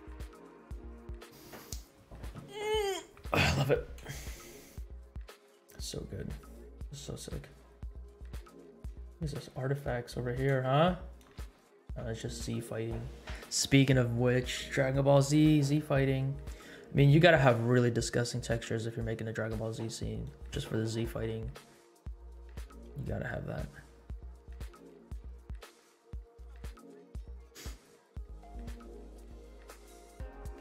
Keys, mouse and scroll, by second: 4.2 space, 7.2-7.8 scroll down 2, 8.2-8.8 scroll up 4, 9.3 shift+middle click, 10.6 space, 11.3 space, 11.9 space, 12.2-12.8 scroll down 6, 15.9-16.3 scroll down 2, 16.3 scroll up 2, 17.1 scroll up 2, 18.2 scroll down 2, 19.7 scroll up 1, 20.4 space, 24.5 space, 25.1 space.